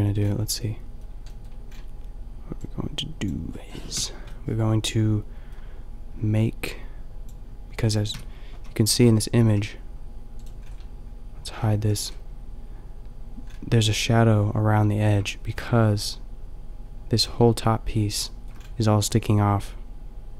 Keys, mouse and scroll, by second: 1.3-2.6 middle drag, 3.2 click, 3.9 KP_5, 4.6 middle click, 8.1 KP_5, 8.6 a, 9.1 Tab, 9.4 g, 11.8 h, 15.6-18.6 middle drag.